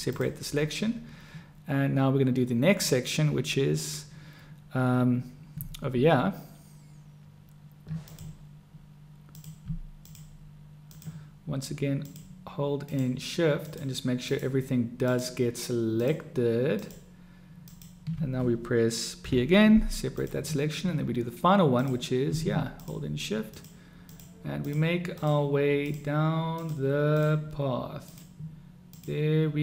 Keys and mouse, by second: 8.0 click, 10.0 shift+click, 11.0 shift+click, 13.6 shift+click, 14.2 shift+click, 15.0-16.8 shift+drag, 17.7 shift+click, 19.3 p, 21.6 click, 23.5 shift+click, 24.1 shift+click, 25.1 shift+click, 26.5 shift+click, 27.2 shift+click, 29.5 shift+click.